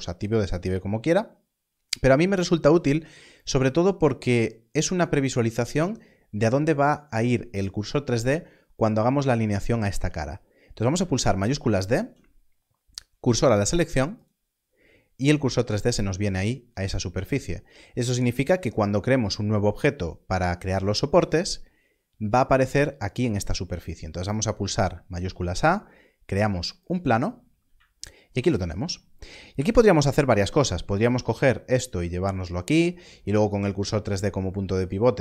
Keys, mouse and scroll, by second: 3.0 click, 11.5 shift+s, 14.1 shift+s, 16.5 click, 16.6 Tab, 25.0 shift+a, 29.5 KP_7, 31.0 g.